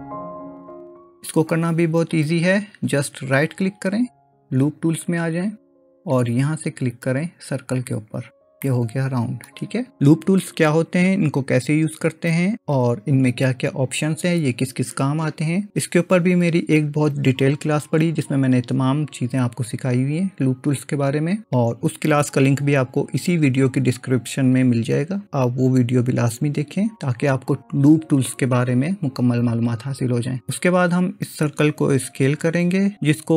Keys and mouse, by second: 0.0 click, 4.0-5.4 right drag, 8.7 middle click.